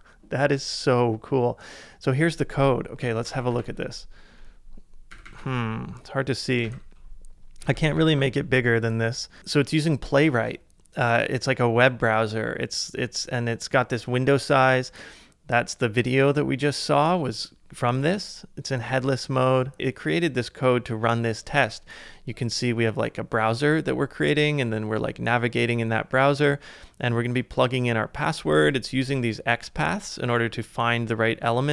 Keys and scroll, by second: 3.0 super+=, 3.2 super+=, 3.3 super+=, 5.1 super+-, 5.2 super+-, 5.4 super+-, 6.6 super+=, 7.9 super+-.